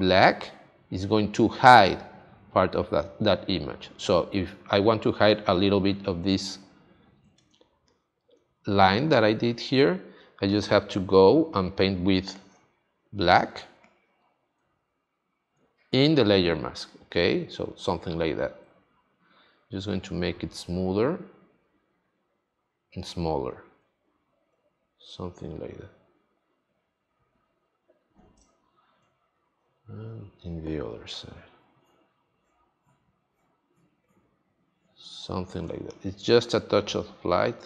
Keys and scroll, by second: 7.5 space, 28.4 space, 35.6 space.